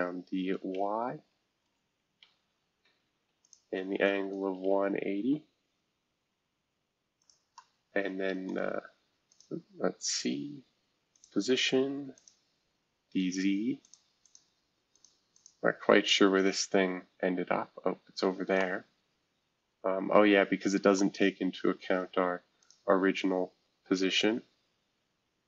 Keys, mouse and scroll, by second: 0.0-2.2 typing, 4.1-5.2 typing, 6.2-6.7 scroll down 2, 7.2 click, 7.5-9.3 middle drag, 9.3 click, 11.1 click, 12.1 click, 13.8 click, 14.2 click, 14.9 click, 15.3 click, 16.6-17.3 scroll down 2, 17.3-20.2 scroll up 3, 18.5-22.4 middle drag, 20.2-21.0 scroll up 1, 22.6 click, 24.0 scroll down 1.